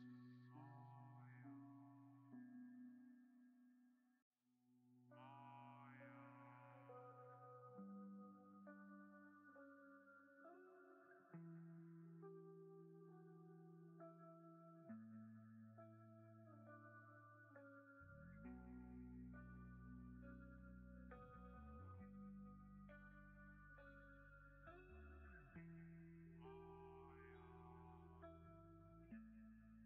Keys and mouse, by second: 3.0 middle drag, 3.5 shift+right click, 3.7 drag, 3.9-4.6 middle drag, 4.9 shift+middle click, 5.6 middle drag, 6.2-6.6 middle drag, 6.9-7.2 middle drag, 7.8 middle click, 8.8-10.5 right drag, 11.2-13.1 right drag, 13.7-14.0 alt+drag, 15.3-16.4 drag, 16.6-17.7 drag, 19.3-21.9 drag, 22.5 g, 25.2 click, 27.8 ctrl+s, 29.8 n.